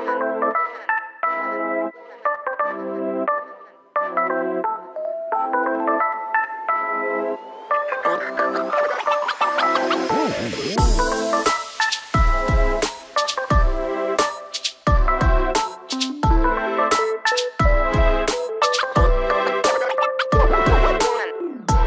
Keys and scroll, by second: 0.8 ctrl+g, 2.3 shift+m, 6.6 shift+space, 11.6 space, 12.7 s, 15.0 shift+space, 15.9 p, 17.3 space, 18.5 ctrl+g.